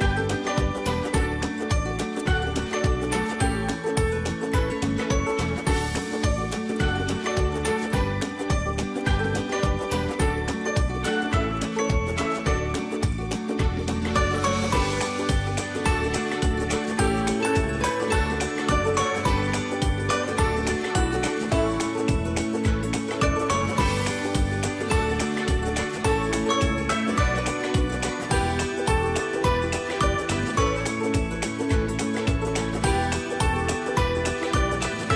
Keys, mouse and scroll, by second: 4.2 Return, 5.7-13.0 alt+drag, 13.3 space, 13.8-16.6 alt+drag, 18.6 space, 19.0-22.6 ctrl+drag, 21.7 typing, 23.0 click, 23.0-23.4 typing, 23.8 alt+click, 24.9 typing.